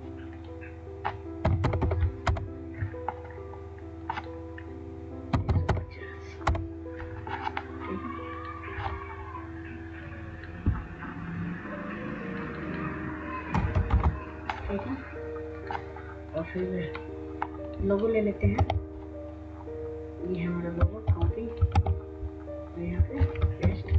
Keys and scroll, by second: 1.5 typing, 2.3 Return, 5.2-6.6 typing, 13.6 BackSpace, 18.7 ctrl+Tab, 21.2 ctrl+c, 21.9 ctrl+Tab.